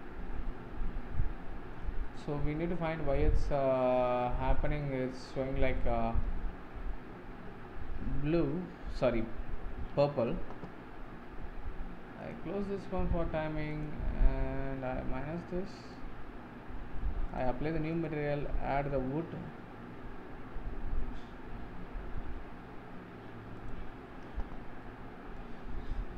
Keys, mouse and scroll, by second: 0.5-5.1 shift+middle drag, 5.3-6.2 shift+middle drag, 6.2-7.6 scroll down 1, 7.6-9.0 scroll down 13, 12.2-13.8 drag, 15.9-23.7 drag, 24.8-25.5 middle drag, 25.5-25.8 scroll up 3.